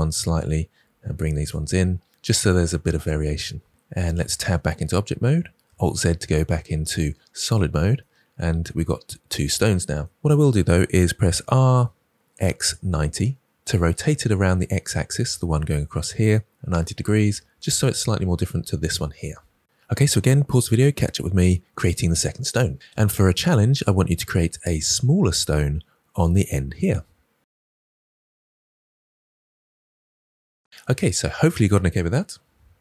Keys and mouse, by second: 0.7 r, 1.3 click, 4.0 Tab, 5.8 alt+z, 11.3 r, 12.3 x, 12.8 9, 12.8 0, 13.5 Return.